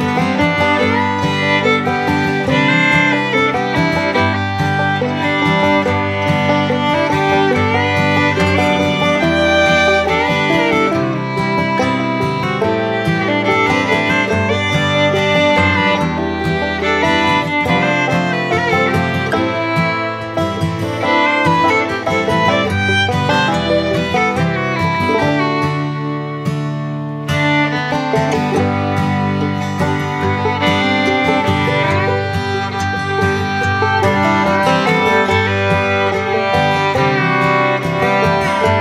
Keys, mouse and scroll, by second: 2.9-4.1 middle drag, 4.4-5.3 middle drag, 5.6 shift+middle click, 6.2 middle click, 6.6 shift+middle click, 9.4 middle click, 10.4 middle click, 11.4 middle click, 12.1 middle click, 13.0 middle click, 13.6 middle click, 14.2-16.4 middle drag, 17.2 middle click, 22.2 middle click, 23.0 shift+middle click, 24.5 click, 24.9 middle click, 27.6 shift+middle click, 28.1 middle click, 28.6 shift+middle click, 29.1-30.2 middle drag, 30.4 shift+middle click, 31.0 middle click, 33.4 middle click.